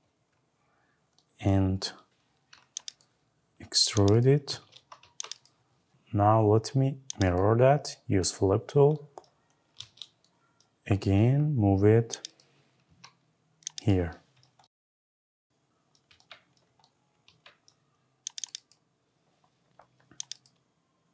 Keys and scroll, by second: 4.5 Escape, 12.7 Left.